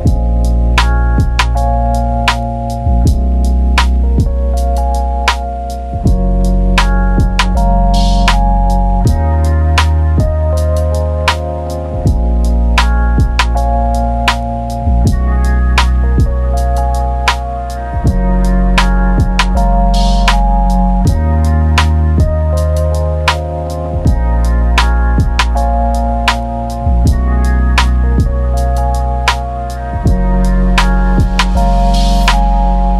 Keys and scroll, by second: 0.1-5.0 typing, 9.1 ctrl+d, 10.0-11.8 typing, 11.3 ctrl+z, 19.7 ctrl+d.